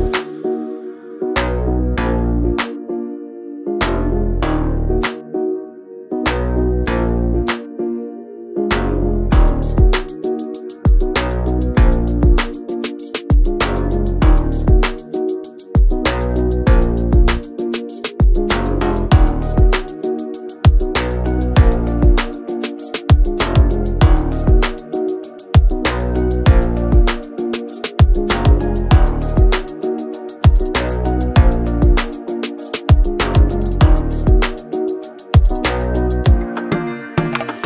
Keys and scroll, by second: 17.9 1, 19.4 Return.